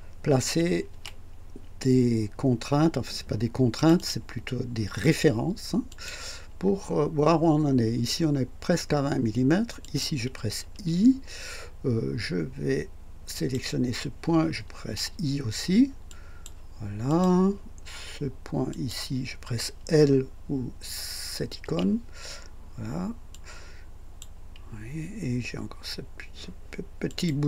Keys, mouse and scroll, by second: 0.9 typing, 3.8 click, 5.9 click, 9.8 click, 10.7 i, 13.3 click, 14.8 i, 16.1-16.6 drag, 17.1 click, 18.7 click, 21.6 typing, 23.3-24.4 drag, 27.1 click.